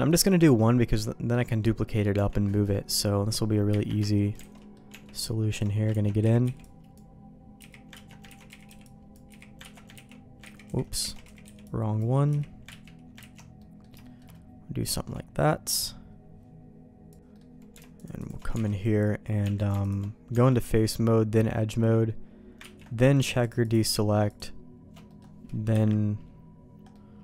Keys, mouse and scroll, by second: 2.1 Tab, 2.4 middle click, 3.6 KP_Divide, 4.4 alt+a, 4.5 middle click, 4.8 Tab, 5.5 alt+click, 6.0 ctrl+x, 6.2 z, 6.4 b, 7.5 z, 7.9 ctrl+q, 8.2 ctrl+x, 8.4 z, 8.6 b, 9.2 z, 9.7 ctrl+q, 9.9 ctrl+x, 10.6 ctrl+z, 11.1 alt+a, 11.2 z, 11.4 b, 12.2 z, 12.6 ctrl+q, 13.3 ctrl+x, 13.5 middle click, 14.0 shift+middle click, 14.9 shift+middle click, 15.3 middle click, 17.3 middle click, 18.1 alt+shift+click, 18.6 alt+a, 19.4 Tab, 19.8 alt+click, 20.3 Tab, 22.6 ctrl+q, 23.6 alt+shift+click, 24.2 alt+shift+click, 25.0 middle click, 25.7 KP_1, 26.9 middle click.